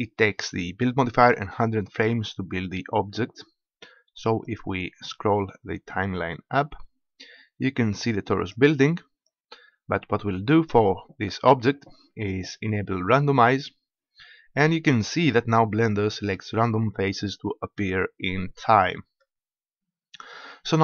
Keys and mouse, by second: 3.5-4.5 middle drag, 4.5-6.5 drag, 9.3-11.3 drag, 13.5-15.4 drag, 15.4 middle click, 16.9-18.5 middle drag.